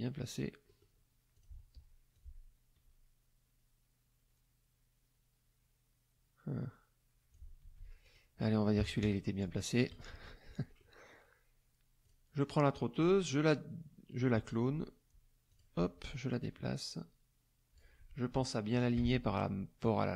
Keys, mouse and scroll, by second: 0.7 click, 1.4 click, 2.1-7.5 ctrl+drag, 7.6 ctrl+z, 8.0 ctrl+click, 8.8 KP_Subtract, 9.0 KP_Add, 10.1 KP_Subtract, 10.8 middle click, 12.0 click, 12.7 middle click, 15.5 click, 16.4-17.9 drag, 18.7 shift+click.